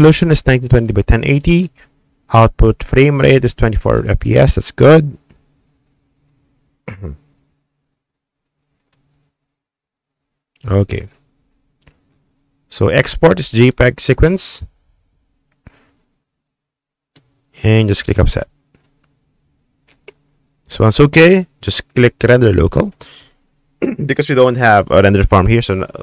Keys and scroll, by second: 4.9-5.9 typing.